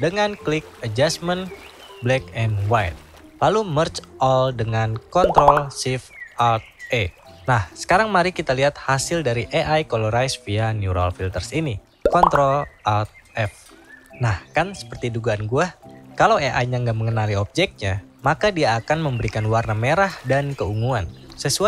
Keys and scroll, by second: 12.3 ctrl+alt+f.